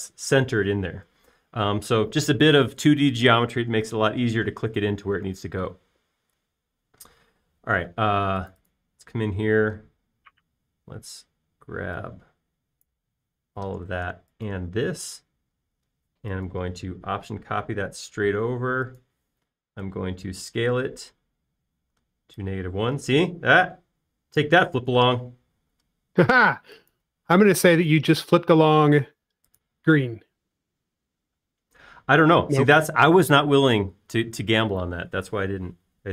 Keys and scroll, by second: 8.8 space, 15.9 shift+m, 21.0 s, 26.4 m, 29.3 space.